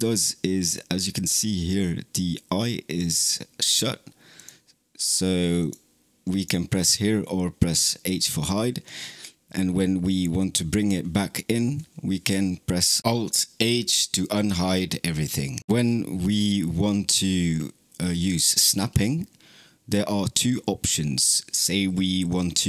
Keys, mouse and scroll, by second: 4.2 click, 5.4 click, 6.2 click, 6.7 click, 14.5 alt+h.